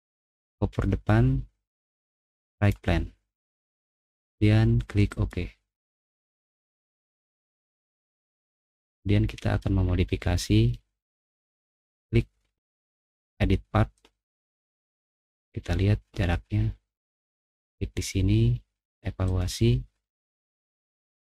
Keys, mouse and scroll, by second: 2.5 right click, 5.1 click, 7.6 middle click, 8.0 middle click, 8.5 middle click, 8.7 click, 8.8 middle click, 9.0 middle click, 9.7-10.5 scroll up 2, 10.4 middle click, 11.7 click, 13.2 click, 14.3 middle click, 14.3 scroll up 2, 16.4 click, 16.4 middle click, 19.2 click, 21.0 click.